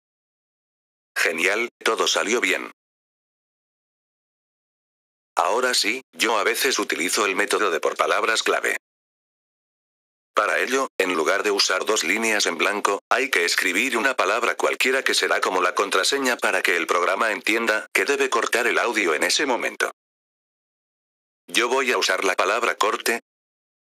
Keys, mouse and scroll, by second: 0.7 F4, 1.1 click, 2.9 F4, 5.2-7.0 drag, 7.6-10.6 drag, 10.3-11.2 typing, 13.0 typing, 14.9-16.6 drag, 16.9 c, 17.4 click, 19.0-20.9 drag, 21.7 click, 23.1-23.9 drag.